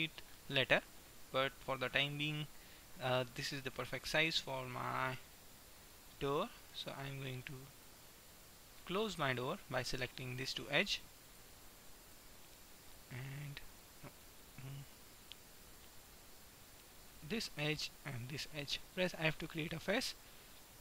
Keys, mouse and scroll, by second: 1.3 middle click, 3.0 middle click, 3.6 middle click, 8.0-9.6 middle drag, 10.5-12.3 drag, 11.3-14.6 right drag, 15.6 click, 17.0 middle click, 17.5-19.1 right drag, 19.3 f.